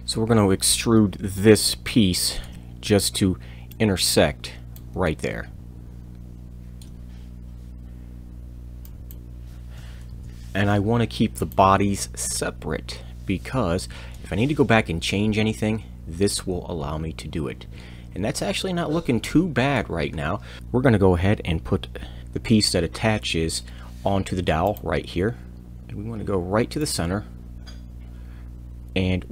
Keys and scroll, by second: 20.6 shift+Return, 22.2 c.